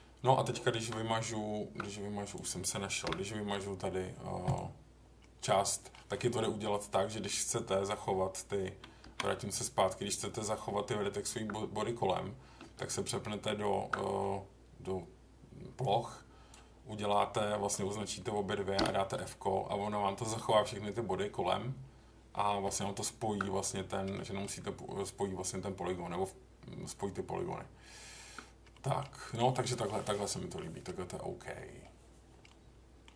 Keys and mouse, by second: 0.9 Tab, 2.2 click, 3.0 Delete, 5.4 middle click, 6.1 middle click, 7.0 middle click, 9.1 ctrl+z, 10.7 Tab, 12.6 Tab, 15.8 click, 18.8 f, 22.6 Tab, 24.1 middle drag, 24.6 Tab, 28.7 middle drag, 29.5 middle click, 30.3 middle click, 32.4 middle click.